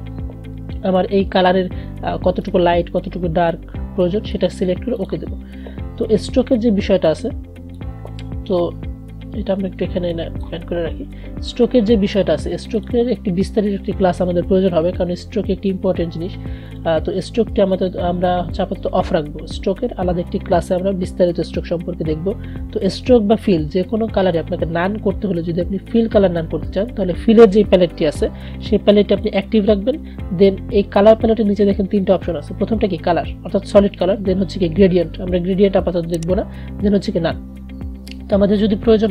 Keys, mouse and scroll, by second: 2.5-12.9 drag, 12.9 click, 16.8 click, 29.3 click.